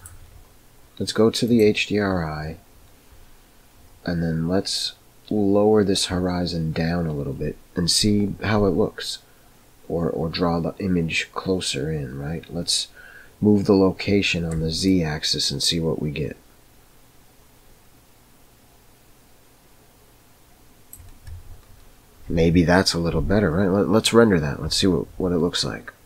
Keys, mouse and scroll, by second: 14.9-21.0 shift+drag.